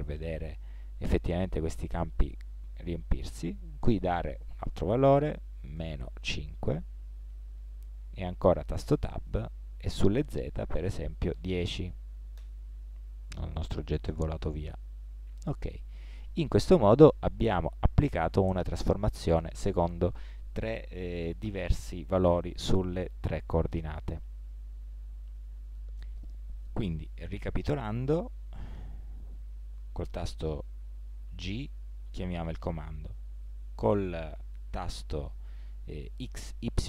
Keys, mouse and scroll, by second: 13.3-18.5 middle drag, 23.6-26.1 middle drag, 29.4 ctrl+z, 31.5 g.